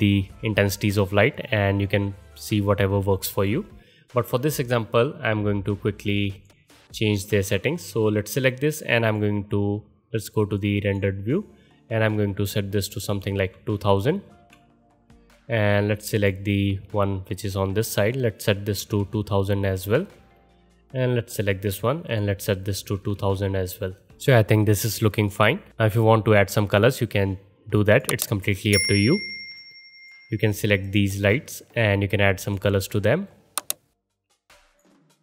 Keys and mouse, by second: 0.8 click, 0.9-2.3 middle drag, 2.3 click, 2.5-6.3 middle drag, 6.3 click, 6.4 middle click, 7.0 click, 7.1-9.0 middle drag, 9.0-10.5 drag, 10.5 middle click, 10.8 click, 10.9-12.0 middle drag, 12.0-16.3 drag, 13.5 KP_0, 16.3-17.7 middle drag, 17.7-21.3 drag, 19.0 KP_0, 19.1 KP_0, 21.3 middle click, 22.1-24.1 drag, 23.1 KP_0, 23.3 KP_0, 24.1-29.5 middle drag, 29.5 click, 29.6-30.8 middle drag, 30.8 click, 30.9-35.2 middle drag.